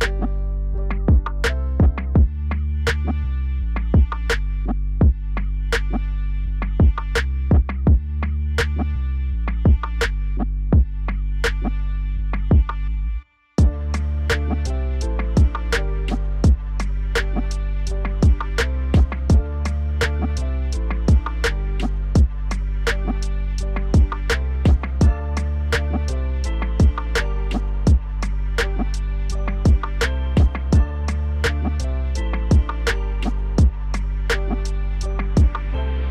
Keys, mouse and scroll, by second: 0.6 scroll up 2, 0.9-2.1 shift+middle drag, 2.1 KP_3, 3.0 g, 4.1 KP_1, 4.8 click, 5.0-6.3 middle drag, 6.3-7.0 scroll down 1, 7.0-7.7 shift+middle drag, 7.7 click, 8.1 click, 8.5 click, 9.0 shift+z, 9.5 KP_7, 11.0 g, 12.5-13.8 middle drag, 13.8 shift+z, 14.1-15.0 middle drag, 15.0 scroll down 2, 15.3-15.6 middle drag, 15.6 drag, 15.9 scroll up 2, 16.2 scroll down 2, 16.4-17.3 middle drag, 17.3 click, 18.1 middle click, 18.5-19.8 scroll up 2, 21.1 KP_1, 21.7-22.3 shift+middle drag, 22.3 ctrl+s, 23.5 KP_Divide, 23.7 scroll up 2, 23.9-24.5 scroll down 2, 24.5 Tab, 24.7 middle click, 25.3 1, 25.6 click, 26.6-27.7 scroll up 3, 27.7 middle click, 28.5 shift+click, 29.0 middle click, 29.6 KP_7, 30.5 3, 31.1 click, 32.0 1, 32.8 ctrl+z, 33.1 ctrl+z, 33.5-33.9 scroll up 3, 33.9 ctrl+z, 34.3 scroll down 1, 34.5-36.0 middle drag.